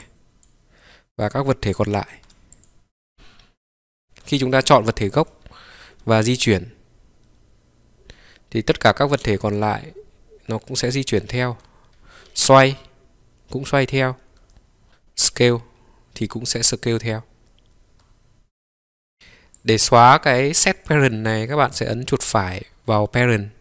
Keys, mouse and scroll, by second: 2.1 click, 2.6-4.1 drag, 4.1 Escape, 4.1 g, 4.4-5.6 drag, 6.1 g, 6.5-14.2 middle drag, 14.2 Escape, 19.1 click, 19.7-20.9 drag, 21.5-23.6 right drag.